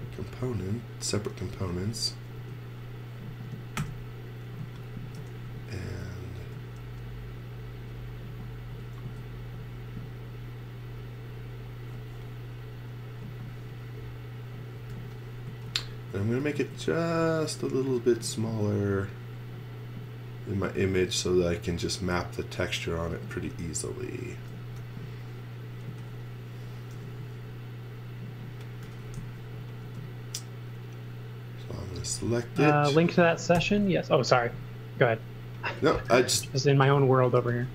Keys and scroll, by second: 0.7-2.4 typing, 3.8-6.4 typing, 8.7 s, 14.9 x, 15.5 z, 16.1 s, 24.3 x, 24.8 v, 25.9 z, 26.9 m, 28.8 x, 29.2 z, 29.8 space, 31.5-32.5 typing, 33.6 n, 35.6-37.7 typing.